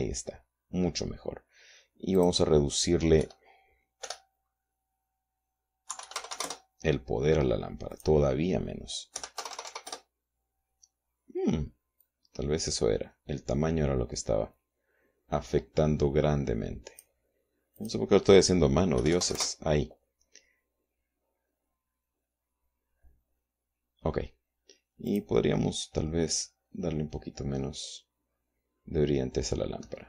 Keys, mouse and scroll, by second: 2.8 click, 3.8 KP_5, 4.7 BackSpace, 6.5 KP_3, 6.7 KP_5, 6.8 KP_0, 7.1 KP_Enter, 8.5 click, 9.8 KP_1, 10.0 KP_0, 10.5 KP_Enter, 12.7-17.8 drag, 19.6 KP_2, 19.7 KP_5, 19.9 KP_0, 20.0 KP_Enter, 25.7 click, 27.1-28.5 scroll down 2.